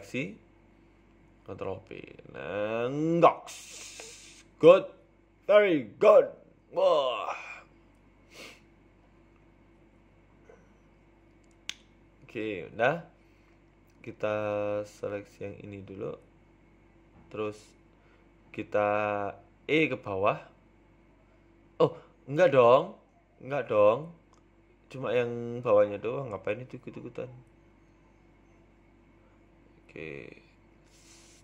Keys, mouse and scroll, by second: 2.6 ctrl+b, 4.3 Tab, 4.5 middle click, 4.7 z, 5.3 scroll down 2, 5.4 middle click, 6.7 KP_1, 7.3 Tab, 7.8 KP_3, 8.3 scroll up 1, 9.0-9.5 scroll up 2, 9.5 click, 12.6 KP_7, 13.2-13.8 scroll down 2, 13.8 scroll down 1, 13.8 a, 13.9 a, 14.0 c, 20.3 middle click, 20.8 KP_1, 21.7 middle click, 23.9 KP_1, 24.5 KP_3, 24.9 z, 26.1 c.